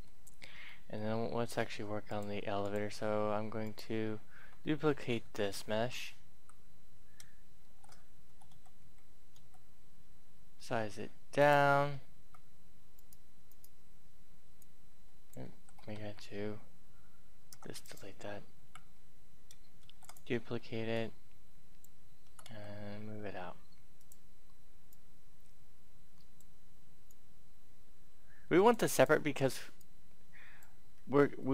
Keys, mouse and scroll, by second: 0.1-0.6 scroll down 1, 0.6 middle click, 2.1 click, 3.6 right click, 3.7-4.4 scroll down 1, 7.6-9.6 typing, 11.3 click, 12.1 Tab, 12.9-14.6 right drag, 15.4 ctrl+z, 15.9 ctrl+Tab, 17.4 Delete, 17.5 click, 18.6 Tab, 19.6 shift+d, 19.8 shift+click, 20.9 click, 21.9-22.9 typing, 23.9-30.9 drag, 30.9-31.4 scroll up 1, 31.4 middle click.